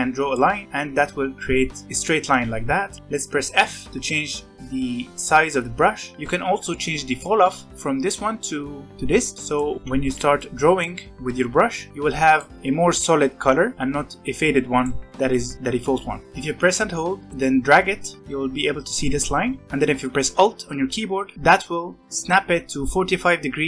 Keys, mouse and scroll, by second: 2.8 ctrl+z, 3.2 f, 6.1-7.7 scroll up 1, 9.5 click, 10.0 ctrl+z, 10.3-11.5 drag, 11.5 ctrl+z, 11.9-13.7 drag, 13.7 ctrl+z, 14.7-16.2 drag, 16.2 scroll up 2, 16.5-19.3 drag.